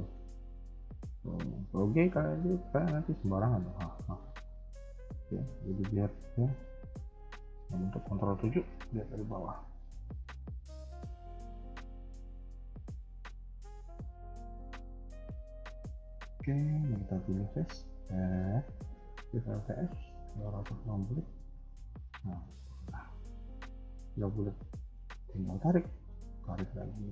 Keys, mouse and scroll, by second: 1.8 g, 4.5 scroll up 1, 4.8 a, 4.9 a, 5.3-5.6 scroll down 1, 5.6 middle click, 6.1 KP_1, 8.2 ctrl+KP_7, 9.1-11.0 scroll up 1, 11.0 click, 11.6 ctrl+click, 12.2 g, 14.0 click, 14.4 ctrl+click, 14.8 g, 16.8 click, 17.5 c, 19.5 alt+shift+s, 22.4-23.0 scroll up 2, 23.3-24.7 scroll down 1, 24.7 click, 24.7-25.6 scroll down 1, 26.0 click, 26.0 g.